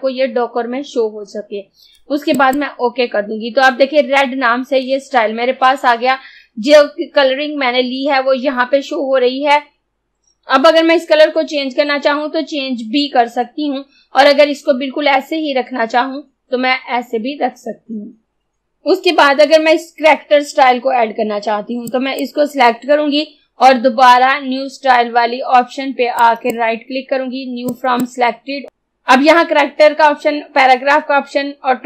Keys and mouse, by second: 2.5 click, 21.9-26.2 drag, 26.2 right click, 27.7 click.